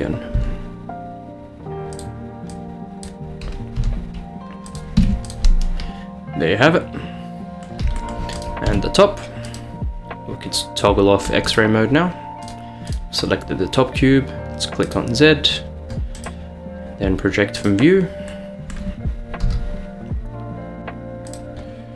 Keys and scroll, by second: 0.4 s, 3.8 g, 5.0 Tab, 8.7 Tab, 19.5 g.